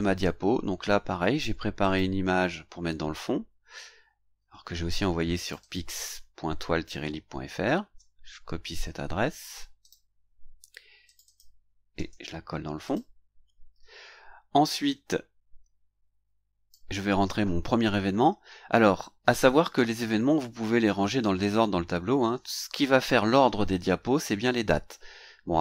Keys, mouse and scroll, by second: 1.8 click, 5.4 click, 7.6 ctrl+c, 9.8 click, 11.0 click, 11.9 ctrl+v, 12.8 click, 14.8-16.9 drag.